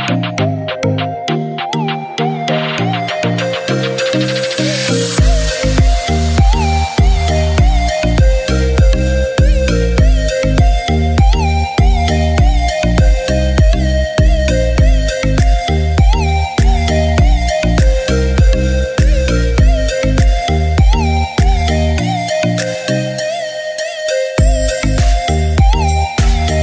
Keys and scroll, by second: 4.9 [.